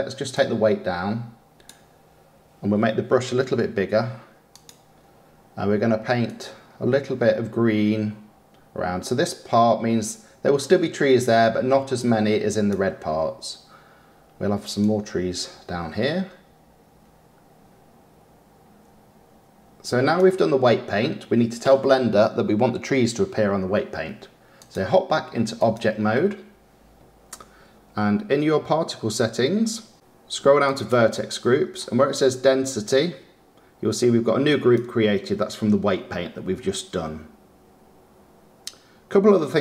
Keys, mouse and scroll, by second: 0.6-3.4 drag, 3.4 f, 6.7-10.0 drag, 15.3-18.4 drag, 26.2-36.0 drag.